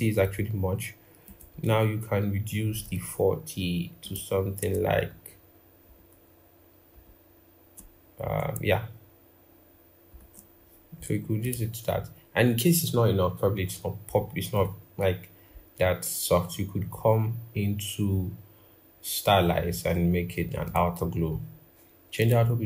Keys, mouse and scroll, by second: 0.0 double click, 4.9 shift+Down, 5.6 shift+Down, 8.4 shift+Up, 9.9 shift+Down.